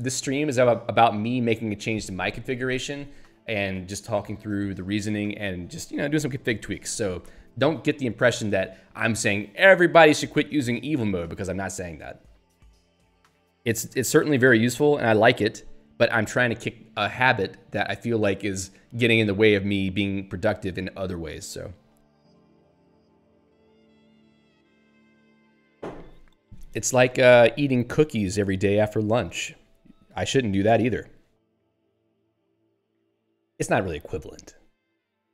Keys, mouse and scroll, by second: 29.1 click, 31.6 q, 32.7 Escape, 32.9 click.